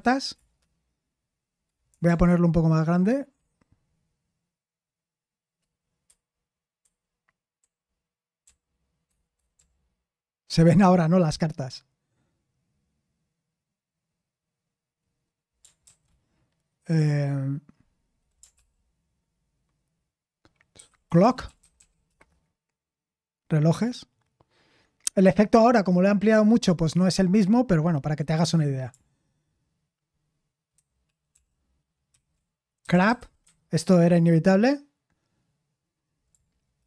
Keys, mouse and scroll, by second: 0.0-0.3 typing, 6.0 ctrl+*, 20.7 ctrl+w, 20.8-22.2 typing, 32.1 ctrl+w, 32.5-33.9 typing.